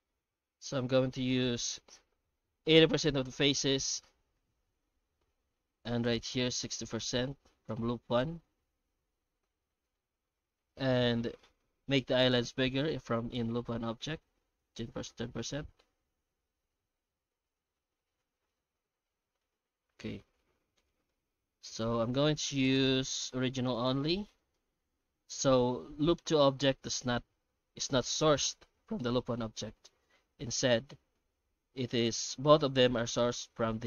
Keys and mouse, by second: 10.3-11.0 middle drag, 11.6 F9, 16.8-19.2 middle drag, 19.8-20.1 middle drag, 20.5-21.1 middle drag, 21.3-21.6 middle drag, 21.8 F9.